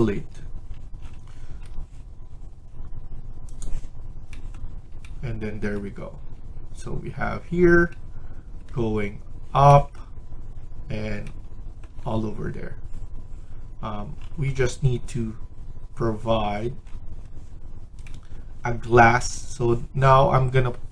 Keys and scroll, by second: 1.3 Escape, 1.6 Escape.